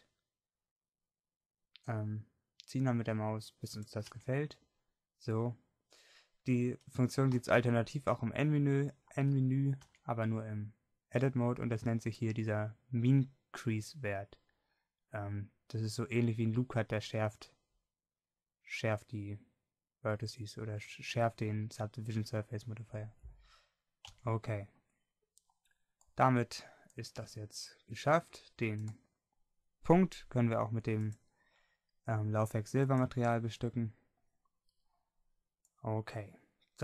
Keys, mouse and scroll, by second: 4.2 Tab, 7.6 n, 10.0 Tab, 24.2 Tab, 34.4-36.8 middle drag.